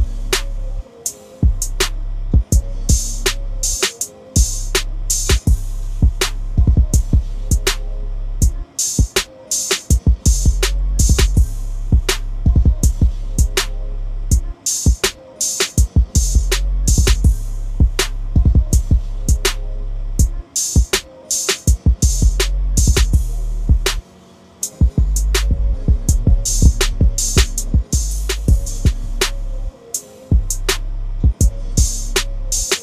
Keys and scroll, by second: 2.1 ctrl+a, 3.4 ctrl+c, 6.1 ctrl+v, 23.7 ctrl+a, 24.9 ctrl+c, 25.5 ctrl+n, 32.7 ctrl+v.